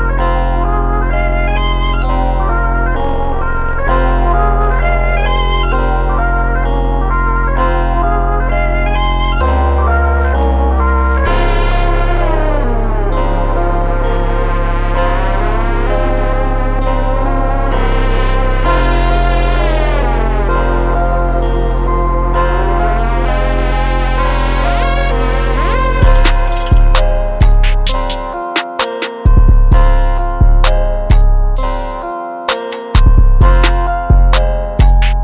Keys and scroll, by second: 33.2 s, 34.1 4.